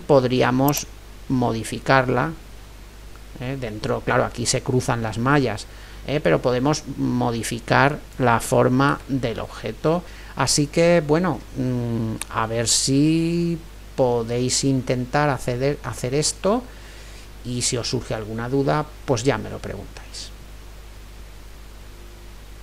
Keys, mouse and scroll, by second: 0.7-2.6 drag, 9.1 ctrl+z, 10.0-11.7 right drag, 11.7-18.5 middle drag.